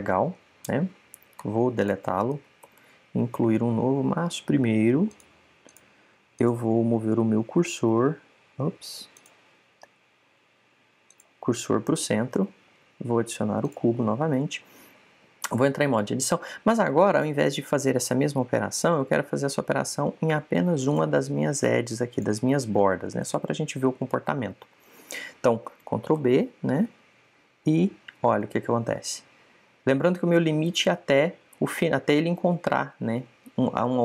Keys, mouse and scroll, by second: 2.3 x, 3.6 shift+a, 6.7 click, 8.9 click, 13.3 shift+a, 16.4 Tab, 21.8-25.1 drag, 24.1 right click, 27.1 ctrl+b.